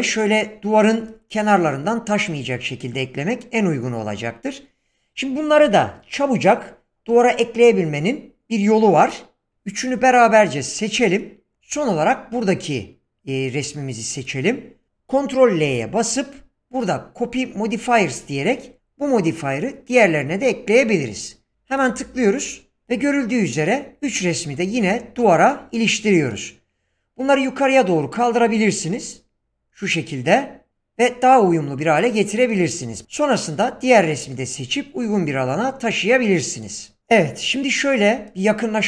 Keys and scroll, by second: 15.6 ctrl+l.